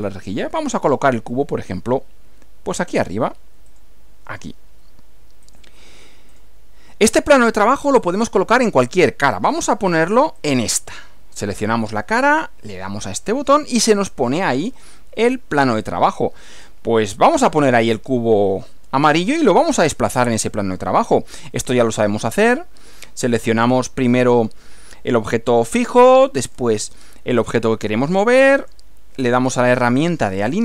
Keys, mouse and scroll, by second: 3.7 click, 5.5 click, 6.3 click, 7.6-9.4 middle drag, 10.4 click, 13.0 click, 14.2-18.0 middle drag, 18.2 middle click, 24.2 click, 26.4 ctrl+click, 28.6 click, 29.7 click.